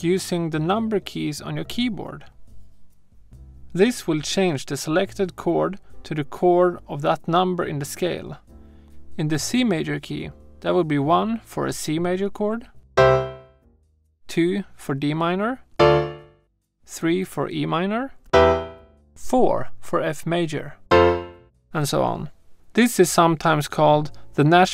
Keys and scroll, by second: 12.9 |, 13.9 1, 15.7 2, 18.2 3, 20.8 4.